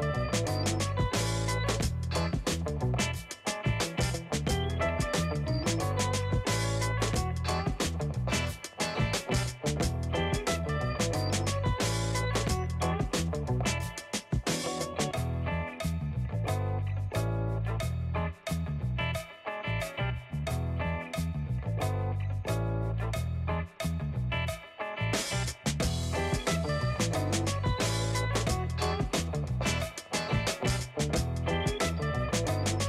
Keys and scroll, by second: 7.2 space, 20.4 shift+Left, 20.6 shift+Left, 24.1 space.